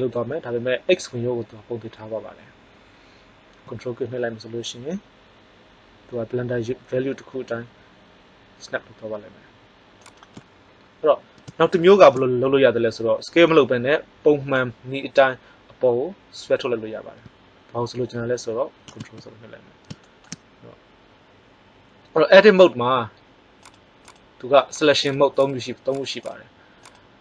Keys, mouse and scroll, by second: 10.1 click, 11.5 middle click, 19.0 ctrl+z, 23.6-24.2 drag.